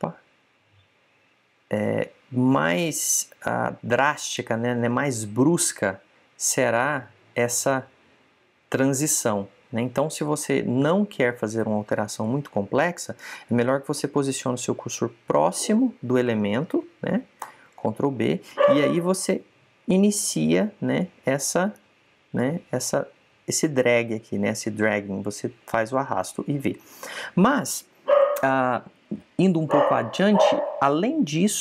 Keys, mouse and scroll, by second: 18.4 ctrl+b.